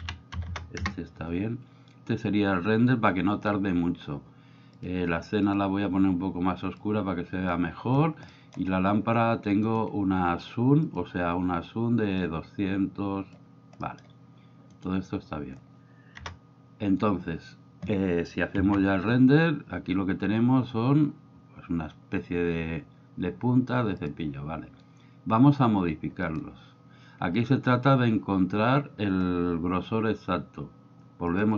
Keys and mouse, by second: 0.5 KP_0, 4.8 click, 8.3 middle click, 9.6-12.2 right drag, 12.2-13.4 drag, 13.8 middle click, 14.7-16.2 right drag, 16.2 KP_0, 18.9 F12.